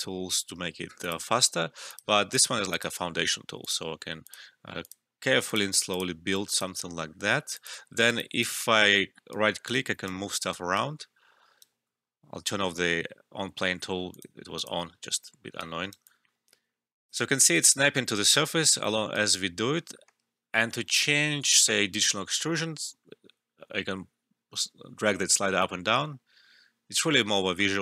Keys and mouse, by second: 3.7 typing, 8.0 alt+right click, 8.1 alt+click, 8.6 alt+middle click, 9.3-11.7 right drag, 13.8-14.1 typing, 14.1 click, 15.6 right click, 16.0-17.5 alt+drag, 16.7-17.1 typing, 17.5 right click, 21.9-27.8 drag.